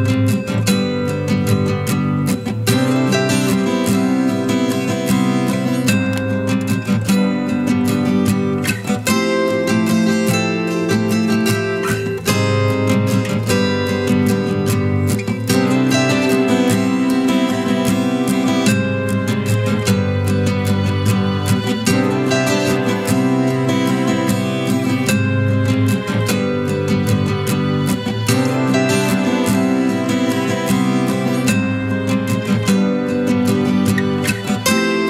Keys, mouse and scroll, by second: 10.8 ctrl+t, 11.6 alt+shift+click, 15.2 alt+s, 15.7 alt+shift+click, 20.2 Return, 21.2 ctrl+=, 26.9 double click, 28.8-29.4 typing, 29.5 double click.